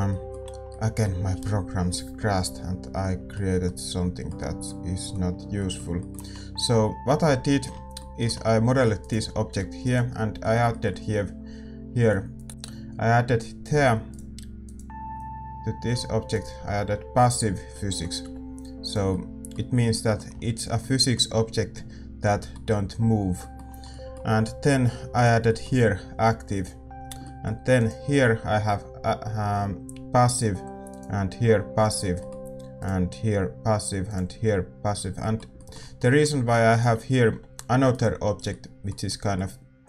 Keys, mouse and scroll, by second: 7.2 a, 9.0-12.0 right drag, 9.4 g, 12.0 click, 12.3-13.7 middle drag, 12.5-19.0 right drag, 13.7 a, 19.0-27.1 middle drag, 19.0 a, 19.0 g, 25.1-27.1 right drag, 27.8-38.4 middle drag, 27.8-38.4 right drag, 36.7 a, 38.4 g.